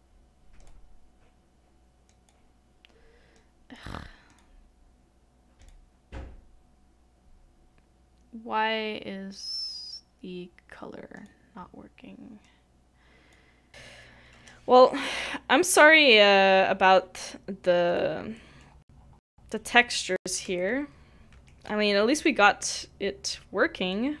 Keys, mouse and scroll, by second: 13.7 middle click, 13.7-14.1 scroll up 1, 14.1 scroll down 1, 14.4 scroll up 1, 14.8 scroll down 1, 14.9-15.3 scroll up 1, 15.3-15.8 scroll down 1, 15.8 scroll up 1, 16.3-16.9 scroll down 1, 16.9 middle click, 18.7 scroll down 1, 22.9 middle click.